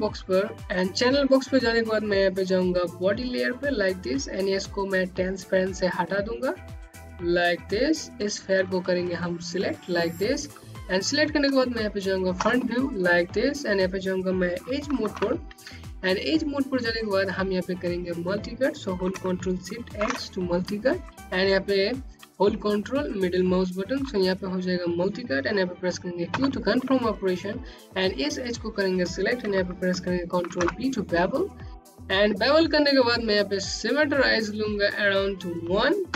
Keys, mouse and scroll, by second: 4.3 click, 9.0-9.3 scroll up 1, 9.8 space, 10.1 click, 10.4 space, 13.3 3, 17.2 ctrl+Num_Lock, 18.0 ctrl+shift+x, 21.0 ctrl+middle click, 21.8 Home, 24.6 q, 26.3 click, 28.8 b, 31.7 click, 32.5 click, 34.5 KP_1, 34.8 KP_Enter.